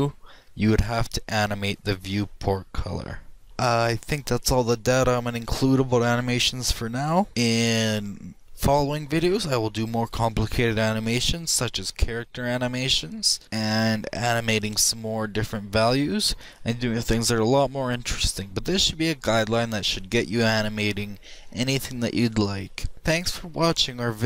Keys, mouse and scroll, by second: 1.3-2.9 drag, 2.9-22.9 middle drag, 22.9-24.2 drag.